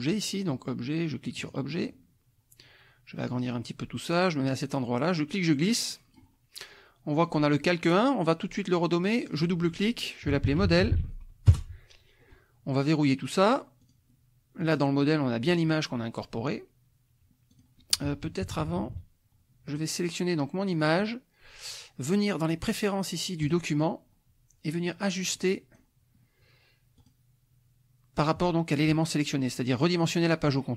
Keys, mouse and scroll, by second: 1.4 click, 5.2-6.3 drag, 7.1 click, 9.2 click, 10.2-11.4 typing, 11.5 Return, 13.8 click, 14.6 click, 17.5 click, 18.4 KP_Subtract, 19.6 click, 20.7 click, 23.4 click, 25.3 click, 26.9 click.